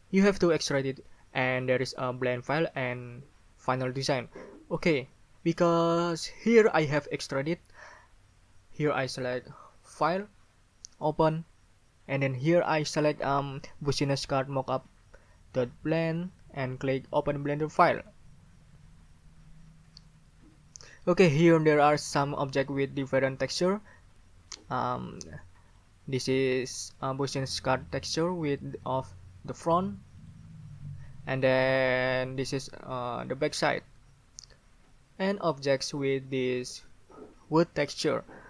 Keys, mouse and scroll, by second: 10.0 middle click, 10.9 middle click, 11.0 click, 15.9 click, 18.0 click, 24.5 right click, 25.0 middle click, 25.2 right click, 25.7 right click, 27.8 right click, 30.2 right click, 33.2 right click.